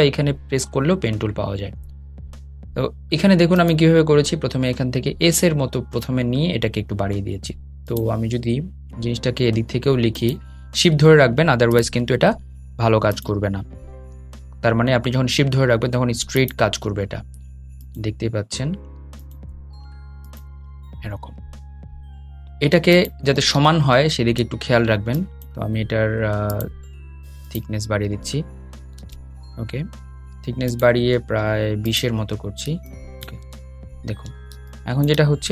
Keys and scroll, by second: 20.9 shift+Escape, 28.0 shift+super+z.